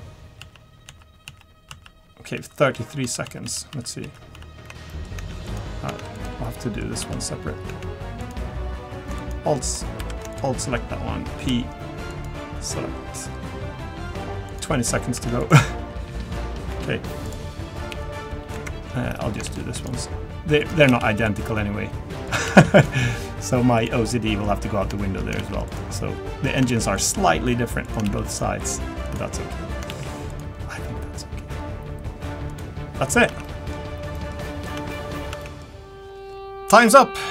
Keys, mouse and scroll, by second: 1.4 ctrl+z, 1.7 ctrl+z, 4.1 ctrl+z, 4.4 ctrl+z, 4.9 middle click, 5.2 Tab, 5.4 click, 5.9 Tab, 6.1 click, 6.4 middle click, 7.0 Tab, 7.7 Tab, 8.2 click, 9.2 alt+click, 10.0 3, 10.3 alt+click, 11.3 p, 12.7-13.0 scroll up 2, 13.0 scroll down 2, 14.5 click, 15.2 Tab, 15.4 click, 16.7 Tab, 17.2 click, 19.4 ctrl+r, 20.9 ctrl+r, 22.6 ctrl+r, 24.1 middle click, 24.5-24.9 scroll up 2, 25.0 shift+middle click, 25.4 ctrl+r, 26.7 ctrl+r, 28.0 ctrl+r, 30.0 ctrl+r, 33.1 scroll down 1, 33.3 Tab, 33.4 middle click, 33.7-34.1 scroll down 2, 34.1 middle click, 34.3-35.3 scroll down 2, 34.8 Tab, 35.3 Tab, 35.4 middle click.